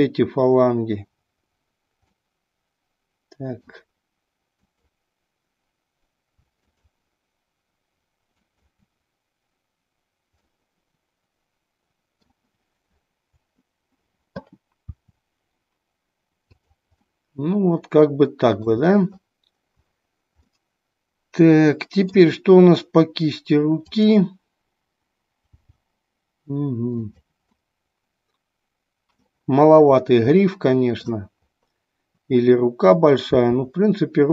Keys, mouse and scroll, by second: 2.2-3.7 middle drag, 4.7-6.0 drag, 6.7-8.1 drag, 8.4-9.7 drag, 10.5-12.3 middle drag, 15.0 r, 16.6 drag, 17.0-18.6 middle drag, 20.5-22.2 middle drag, 23.7 click, 25.6 g, 27.6-29.1 middle drag, 30.5 middle click, 33.3 r.